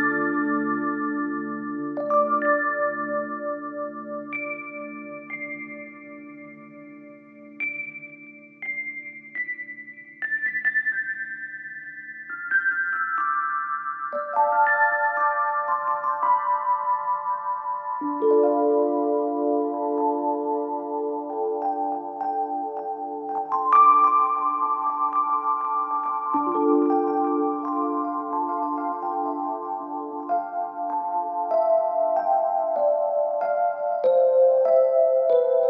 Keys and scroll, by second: 7.3-8.9 typing, 14.6 F9, 29.1-30.7 typing, 31.1 Return.